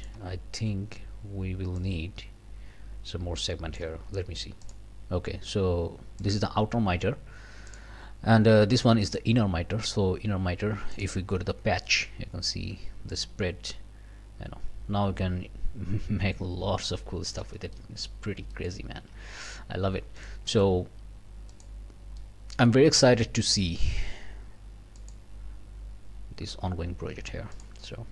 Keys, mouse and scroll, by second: 1.8-4.0 drag, 4.6 click, 6.2 click, 7.7 click, 9.1 click, 10.9 click, 11.5 scroll down 1, 11.9 click, 13.1-17.6 drag, 17.7 click, 18.2 scroll down 2, 18.5 click, 19.0 alt+a, 20.2 click, 21.5 click, 21.9 scroll up 2, 22.2 click, 23.1 click, 25.0 click, 27.5 click.